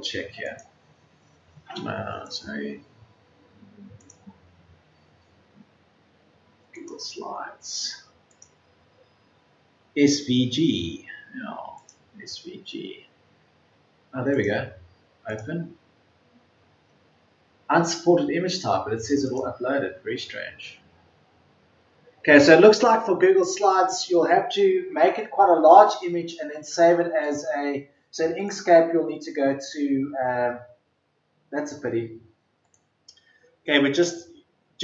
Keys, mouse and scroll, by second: 2.7 Delete, 7.0 Delete.